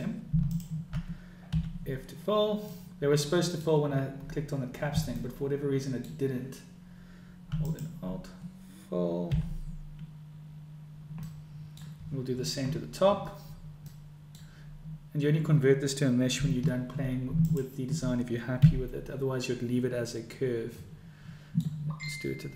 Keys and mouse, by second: 1.7 f, 2.7 click, 2.7 middle click, 5.1 click, 5.1 middle click, 7.6 alt+click, 9.9 f, 11.4 click, 13.9 click, 17.3 alt+click, 19.6 f, 20.8 click, 21.0 right click, 21.6 right click.